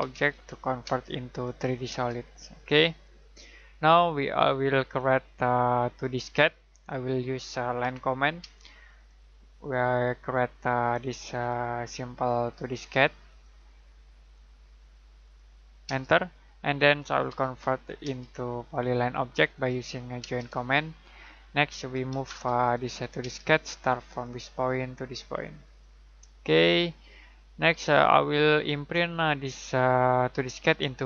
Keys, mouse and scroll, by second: 0.0-0.8 typing, 1.3 click, 1.9 space, 3.0 click, 6.5 scroll down 1, 7.1 middle click, 7.8 l, 8.4 space, 9.0 click, 15.8 space, 17.2 j, 18.0 space, 18.7 click, 20.2 space, 20.8 middle click, 22.1 m, 22.2 space, 22.6 click, 23.2 space, 24.0 click, 26.4 shift+middle click.